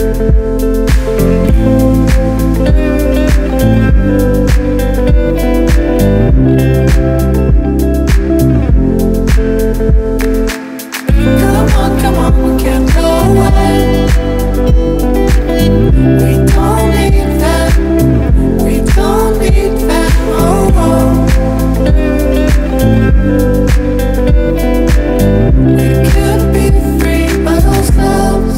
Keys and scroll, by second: 0.7 scroll down 1, 1.6 scroll down 1, 3.7 scroll down 1, 17.1 scroll down 1, 21.6 scroll down 1, 22.9-23.9 scroll down 1, 24.7 scroll down 1.